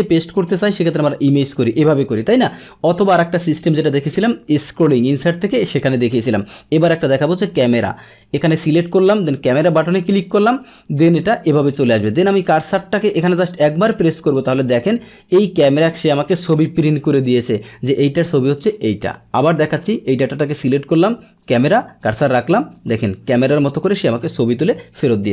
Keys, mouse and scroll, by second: 0.8 click, 1.7 click, 2.8 Delete, 7.2-8.7 drag, 9.6 click, 13.5 click, 14.3-16.6 drag, 18.7 click, 19.4 Delete, 19.9 Delete, 19.9 click, 21.4 click, 22.0 click, 22.7 click, 25.1 Delete.